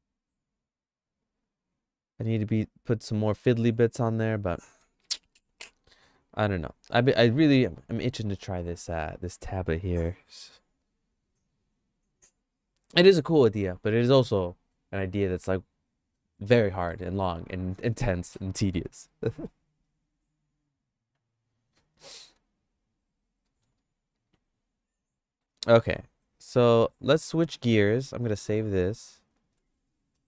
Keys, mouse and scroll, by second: 4.5 middle click, 5.0 shift+middle click, 6.1 middle click, 6.6 shift+middle click, 8.2 middle click, 8.6 shift+middle click, 19.1 middle click, 23.5 middle click, 23.9-25.5 shift+middle drag, 29.6 ctrl+s.